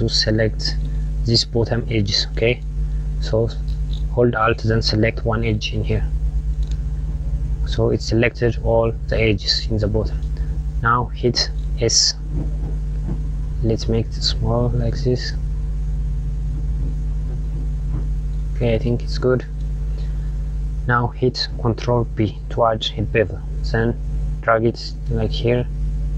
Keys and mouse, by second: 2.5 click, 5.1 alt+click, 9.4 click, 11.3 s, 15.9 click, 21.5 ctrl+b.